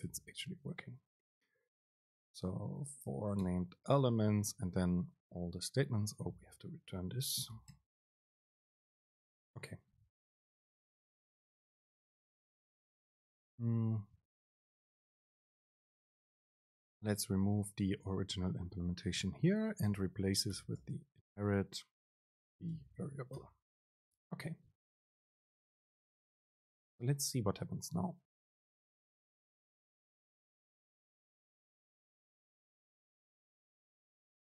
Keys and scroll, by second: 4.6 Up, 6.6 shift+Left, 8.5 BackSpace, 10.2 Up, 16.8 BackSpace, 18.3 Up, 18.9 BackSpace, 19.9 BackSpace, 20.2 super+space.